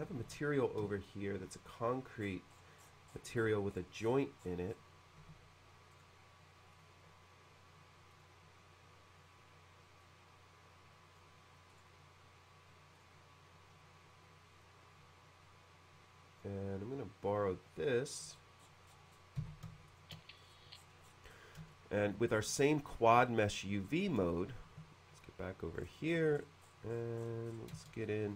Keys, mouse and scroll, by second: 0.2 shift+c, 0.9-1.9 shift+middle drag, 2.3-3.8 scroll up 2, 4.0-4.3 scroll up 1, 4.4-5.1 scroll down 1, 5.2-6.0 typing, 6.0 right click, 6.8 click, 8.2 click, 10.1-11.2 drag, 11.8 right click, 14.7-16.5 drag, 17.5-18.0 drag, 18.4 middle click, 18.4-19.0 scroll down 1, 19.2-19.5 scroll down 1, 19.4 b, 19.9 shift+click, 20.4 middle click, 20.5 scroll up 1, 20.6 scroll down 1, 20.9 scroll up 1, 21.1 scroll down 1, 21.2 scroll up 1, 21.8 shift+middle click, 22.4-23.0 shift+scroll up 1, 23.3 shift+middle click, 23.9 shift+scroll up 1, 24.0 scroll down 1, 24.4 shift+middle click, 25.8-26.1 scroll up 1, 27.2-27.5 scroll up 1, 27.8-28.3 scroll up 1, 27.8 space, 28.3 click.